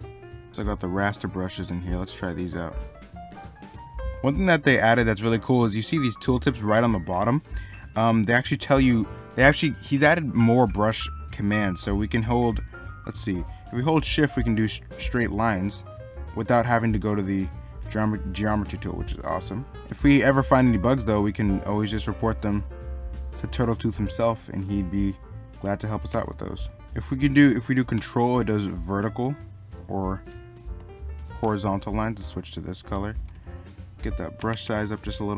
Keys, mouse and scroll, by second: 0.5 ctrl+z, 4.1 ctrl+z, 4.9 middle click, 8.4 middle click, 11.1 middle click.